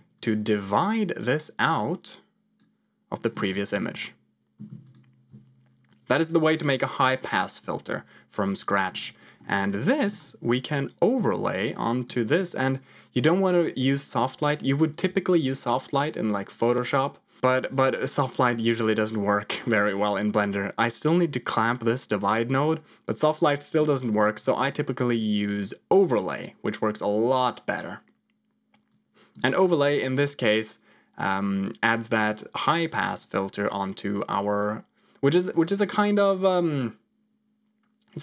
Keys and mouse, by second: 0.1 click, 0.6-2.6 drag, 3.4 ctrl+shift+click, 4.8 ctrl+shift+click, 8.4 click, 9.4 middle click, 10.1 ctrl+shift+click, 11.6 click, 13.1 click, 13.8 ctrl+click, 14.8-16.4 drag, 21.4 click, 23.4 ctrl+click, 24.1-25.4 drag, 28.8 click, 34.5-35.7 drag.